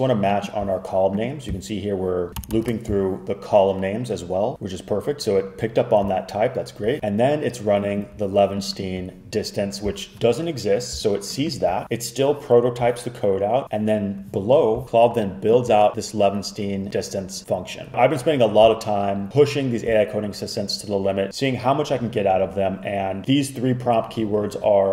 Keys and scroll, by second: 2.3 alt+Left, 2.5 alt+shift+Right, 2.6 alt+shift+Right.